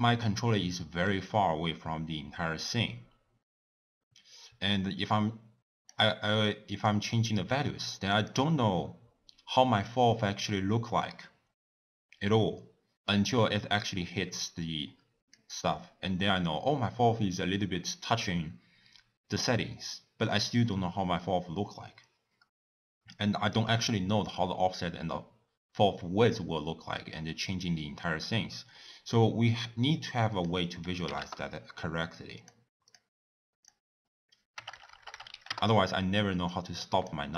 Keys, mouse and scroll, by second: 0.2-1.3 middle drag, 1.3-4.3 scroll down 1, 4.7-9.9 drag, 13.1-16.1 drag, 26.3-29.3 drag, 30.3-34.7 drag, 34.7 BackSpace, 34.8 BackSpace, 35.1 BackSpace, 36.5-37.3 drag.